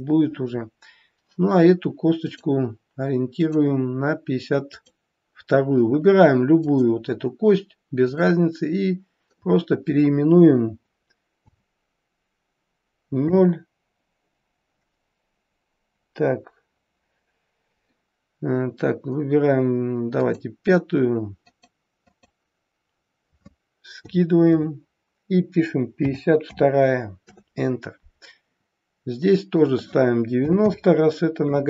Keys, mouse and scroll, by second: 2.2 click, 8.1 click, 21.4 click, 29.6 click.